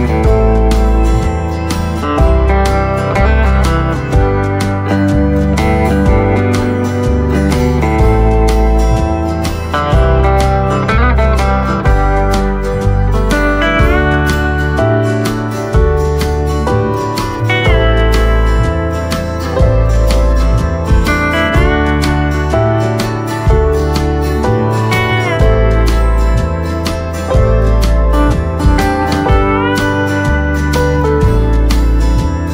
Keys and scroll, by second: 1.0 Tab, 1.7 space, 2.2 space, 3.6 space, 4.1 space, 5.6 space, 7.1 space, 7.7 space, 11.5 space, 13.7 space, 14.4 space, 15.6 v, 18.7 Tab.